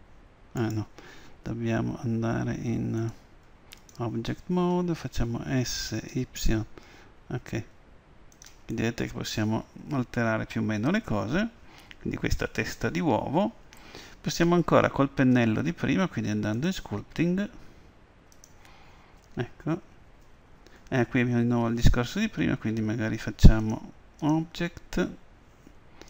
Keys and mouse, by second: 1.2 click, 1.7 right click, 1.8 Escape, 3.1-4.9 drag, 5.7 s, 8.8-10.8 middle drag, 16.6-18.4 drag, 23.7-25.6 drag.